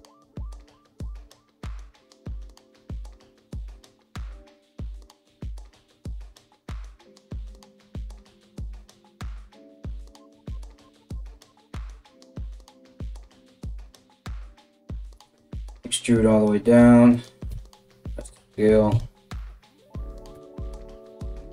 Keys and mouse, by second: 0.0-1.3 typing, 0.4 right click, 0.6 right click, 1.0 right click, 1.1-8.8 middle drag, 1.7 alt+x, 3.1 KP_3, 4.7 right click, 5.1 3, 5.5 g, 6.6 ctrl+r, 7.2 Tab, 8.3 Tab, 8.3-12.5 typing, 8.8 right click, 9.0-21.5 middle drag, 9.2 right click, 10.0 right click, 10.2 right click, 10.6 right click, 10.8 right click, 11.3 right click, 11.6 right click, 12.0 right click, 12.3 right click, 13.8 alt+right click, 13.9 KP_1, 14.9 e, 17.1 s, 18.5 KP_3, 19.9 g.